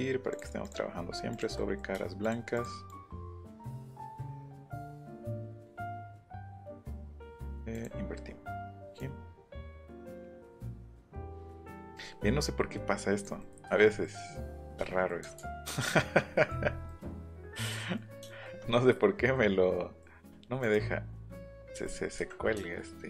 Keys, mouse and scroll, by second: 0.3 shift+click, 0.6 shift+click, 1.3 shift+click, 2.2 shift+click, 2.9 shift+click, 3.5 shift+click, 4.0 shift+click, 4.4 shift+click, 7.7 click, 8.6 click, 8.9 right click, 10.1 click, 10.4 middle click, 11.1 right click, 11.9 right click, 13.2 right click, 13.4 middle click, 13.7 Escape, 15.4 ctrl+z, 15.7 ctrl+z, 20.6 right click, 21.6 right click, 22.2 Escape.